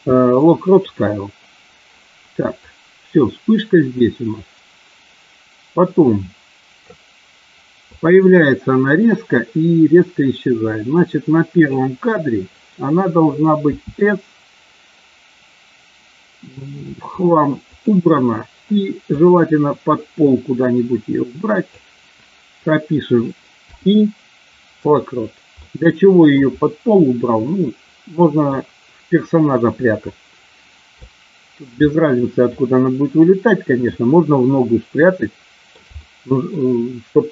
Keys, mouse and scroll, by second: 2.7-6.8 drag, 7.9-11.8 drag, 13.6 s, 17.6 click, 19.0-21.7 drag, 23.5 i, 25.5-26.4 middle drag, 27.0-28.4 middle drag, 31.0 shift+middle click, 31.8-33.9 middle drag, 35.0 shift+middle click, 36.0 middle click.